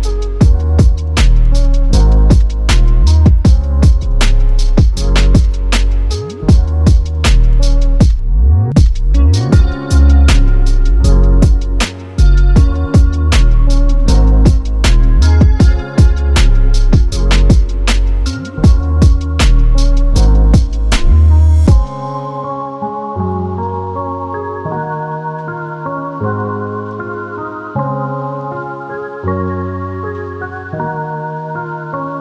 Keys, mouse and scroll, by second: 0.1 click, 18.6 right click, 20.3 click, 22.4 click, 25.4 click, 28.5 click, 30.6 click, 31.4 space.